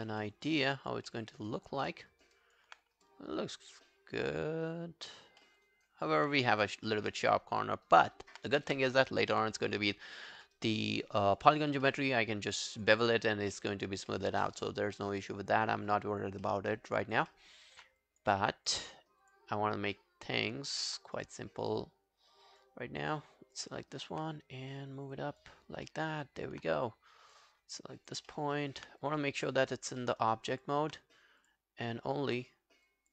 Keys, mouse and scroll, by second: 0.0 alt+right click, 0.2 alt+middle click, 0.5 alt+right click, 0.7 alt+click, 1.1 alt+middle click, 1.3 alt+right click, 1.5 alt+click, 1.9 alt+middle click, 2.1 alt+right click, 2.4 alt+click, 2.8-3.1 scroll down 4, 3.1 alt+click, 5.4 alt+middle click, 5.7 alt+right click, 6.9 alt+middle click, 7.1 alt+right click, 7.4 alt+click, 9.6 alt+click, 10.0 alt+scroll down 1, 10.3 alt+click, 10.6 alt+right click, 10.9 alt+middle click, 11.1 alt+right click, 11.4 alt+click, 11.9 alt+middle click, 12.1 alt+right click, 12.6 alt+click, 13.5 alt+click, 13.5 alt+middle click, 13.9 alt+scroll down 4, 14.1 alt+middle click, 14.5 alt+scroll up 2, 14.7 alt+click, 15.0 alt+middle click, 15.3 alt+scroll up 2, 15.5 alt+click, 16.5 alt+middle click, 16.8 alt+right click, 17.1 alt+click, 17.3 alt+middle click, 17.6 alt+right click, 18.5 alt+click, 19.5 alt+click, 19.6 right click, 20.5 alt+click, 21.9 right click, 23.8 alt+click, 25.6 alt+scroll down 2, 25.9 alt+middle click, 26.3 alt+click, 27.8 alt+click, 28.3 alt+middle click, 28.6 alt+right click, 29.0 right click, 30.0 alt+middle click, 30.2 alt+right click, 30.5 alt+click, 31.9 right click, 32.9 alt+click.